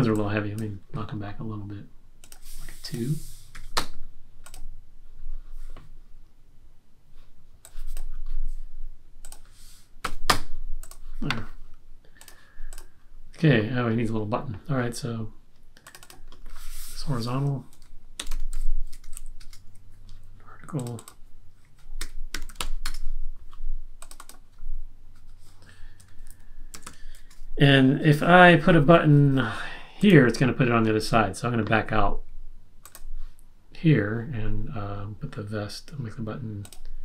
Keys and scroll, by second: 3.7 typing, 10.0 1, 10.2 Return, 17.7-19.3 typing, 21.9-23.0 typing, 25.7-27.3 typing.